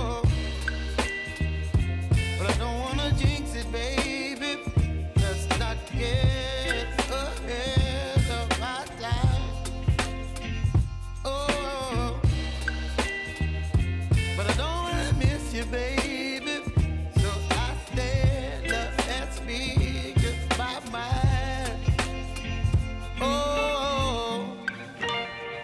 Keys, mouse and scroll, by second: 1.0 click, 1.3 ctrl+d, 1.9 ctrl+d, 2.5 click, 4.2 ctrl+a, 4.5-5.8 typing, 6.8-23.2 drag, 24.8 click.